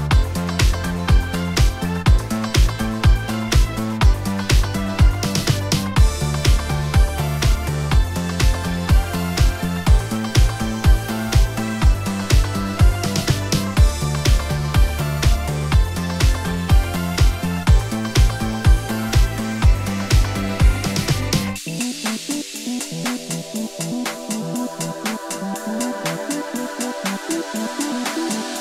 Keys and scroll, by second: 2.1 x, 3.0 F11, 12.1 F11, 18.3 x, 20.5 shift+space, 21.3 alt+shift+space, 23.5 F11.